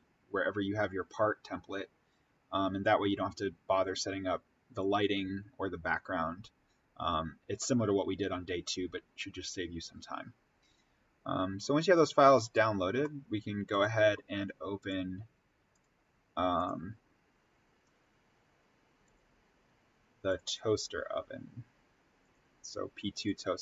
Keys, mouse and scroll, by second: 12.3 click.